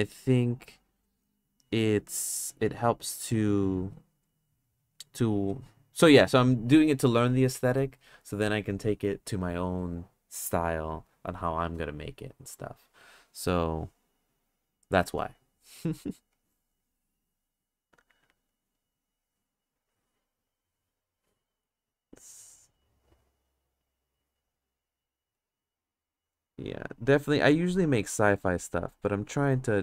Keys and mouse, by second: 0.1-1.6 drag, 2.2 click, 3.6 click, 4.2 click, 5.0 click, 16.4 click, 18.5 click, 19.1 click, 20.4 click, 21.7 click, 22.6 click, 24.9 click, 25.7 click, 26.9 click, 28.3-29.4 drag.